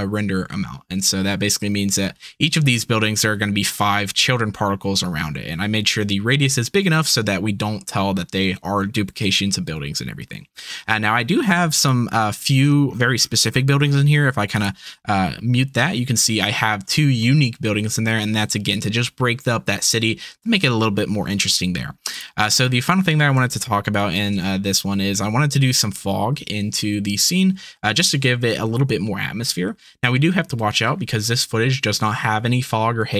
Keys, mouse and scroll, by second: 14.5 click, 22.3 click, 23.6 shift+drag, 23.7 shift+middle click, 23.8 shift+click, 24.0 shift+middle click, 25.0 z, 25.1 z, 28.1 z.